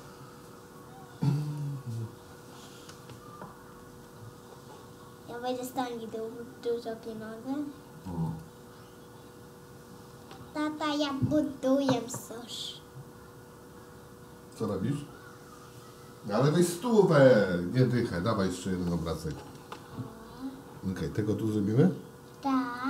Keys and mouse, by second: 3.9 shift+d, 10.9 shift+d, 18.0 shift+d.